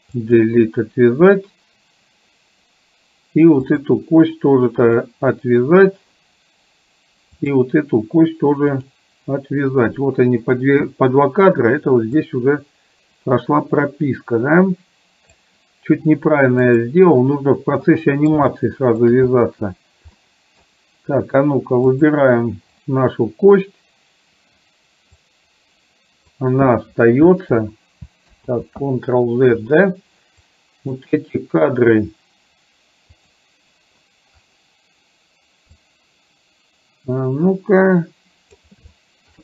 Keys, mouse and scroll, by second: 0.2 click, 3.8 click, 4.9 click, 7.4 click, 8.8 click, 12.3-15.5 drag, 16.7 click, 17.9 middle click, 18.7 shift+middle click, 20.3 middle click, 22.2 click, 25.3-26.4 drag, 28.5 ctrl+z, 30.5-31.0 drag, 33.3 click, 36.0-38.7 drag, 39.1 shift+middle click.